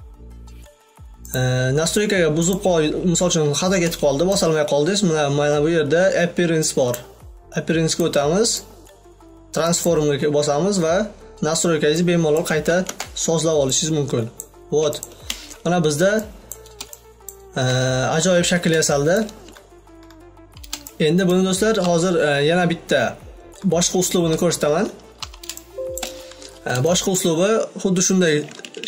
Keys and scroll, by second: 27.9 shift+o.